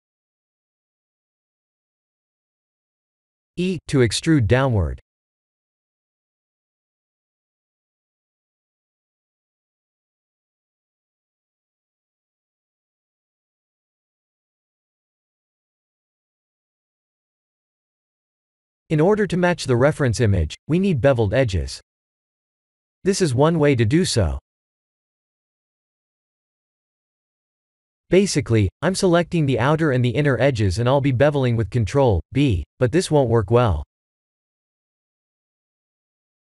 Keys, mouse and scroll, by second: 0.9 Tab, 1.3 middle click, 2.9 ctrl+z, 3.7 e, 8.2 middle click, 9.9 Tab, 10.5 shift+z, 10.8 middle click, 13.7 KP_1, 14.5 KP_7, 14.6 shift+z, 16.6 Tab, 17.0 middle click, 18.8 alt+click, 19.3 alt+click, 19.9 middle click, 20.2 2, 21.0 shift+middle click, 21.7 click, 22.4 alt+click, 25.0 alt+shift+click, 25.6 alt+shift+middle click, 26.7 shift+middle click, 28.3 alt+shift+click, 29.8 middle click, 31.1 alt+shift+click, 32.0 ctrl+click, 33.3 alt+shift+click, 34.1 shift+click, 34.9 shift+click, 35.4 middle click, 36.1 shift+middle click.